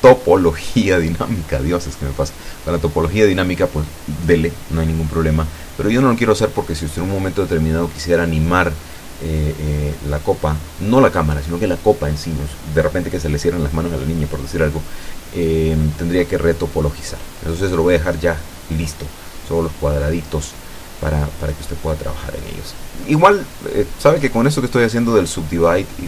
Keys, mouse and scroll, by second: 5.6 c, 6.8 Escape, 7.1 a, 8.7 c, 9.1-10.3 drag, 10.8-16.9 drag, 17.0 Escape, 19.1 w, 20.2 click, 22.3 click, 22.8 click, 24.4 Tab, 25.1 middle click, 25.8 shift+middle click.